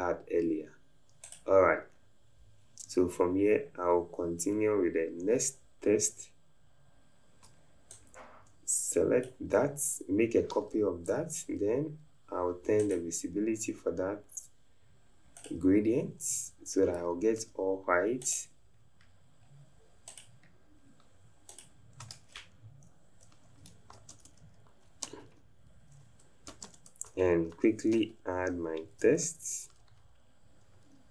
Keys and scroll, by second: 17.4 t, 25.3 BackSpace, 26.5 f, 27.5 Caps_Lock, 27.9 BackSpace, 29.0 q, 29.2 Caps_Lock, 29.8 BackSpace.